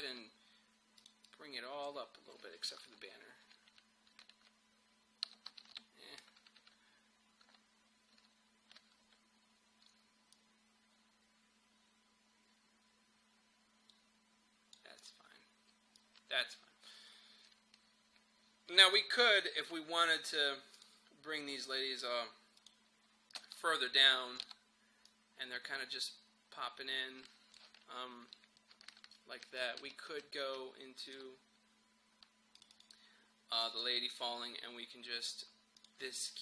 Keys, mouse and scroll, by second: 0.0-3.1 shift+drag, 3.1 shift+Up, 5.7 shift+Up, 6.2 Down, 10.4-28.8 drag, 28.8 Page_Down, 29.5 Page_Up, 29.8 Page_Down, 31.1 click.